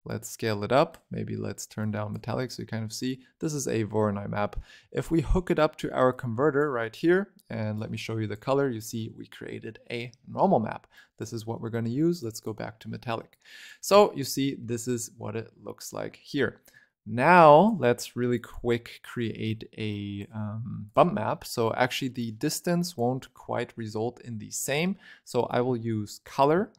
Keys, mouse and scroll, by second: 0.0-2.7 drag, 2.7-3.8 middle drag, 3.8-6.0 scroll up 6, 6.0 click, 7.6 click, 8.9-10.8 middle drag, 10.8 ctrl+right click, 11.4 middle click, 12.1 click, 12.7 middle click, 13.2 click, 13.9-16.4 shift+middle drag, 16.4 scroll down 3, 16.6 middle click, 17.3-18.3 drag, 18.9 click, 20.8 click, 21.1-22.0 scroll up 4, 22.1 click, 23.9-24.4 scroll up 5, 24.4-25.4 scroll down 3, 25.4 click, 26.6 shift+a.